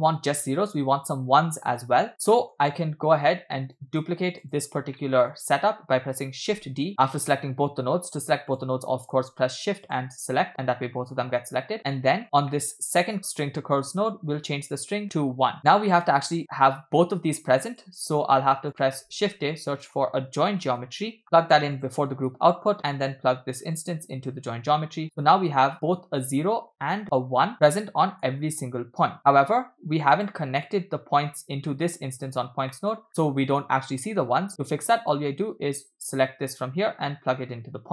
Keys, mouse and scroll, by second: 0.7-1.3 scroll down 1, 1.3 scroll down 2, 1.9-2.3 scroll down 5, 2.3 middle click, 3.8 click, 4.4 shift+click, 5.0 middle click, 6.6 shift+d, 8.6 click, 9.9 shift+click, 10.9 middle click, 11.2-11.6 scroll up 2, 11.8 click, 11.9 middle click, 12.2 scroll up 3, 12.5 middle click, 13.9-15.0 drag, 15.6-16.3 scroll down 4, 15.9 middle click, 16.7-17.5 scroll down 1, 17.5 scroll down 1, 17.6 middle click, 18.4 click, 18.8 middle click, 19.2 shift+a, 23.8-25.0 drag, 25.7-26.2 scroll up 6, 26.8-27.4 scroll down 2, 27.5-28.3 shift+middle drag, 30.2 click, 31.7 middle click, 31.9 scroll up 2, 32.2 click, 32.7 middle click, 33.1-33.5 scroll down 2, 35.1-37.9 drag.